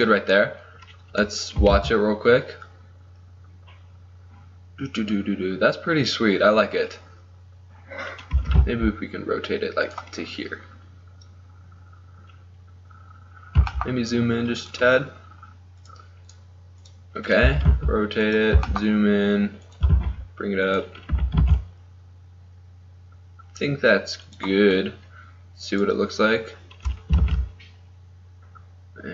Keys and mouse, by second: 1.8 alt+a, 8.6 r, 10.5-11.8 middle drag, 13.3 middle click, 13.8 g, 15.1-17.0 drag, 17.5 r, 18.7 g, 19.9 g, 21.2 r, 25.8-27.3 drag, 27.3 alt+a.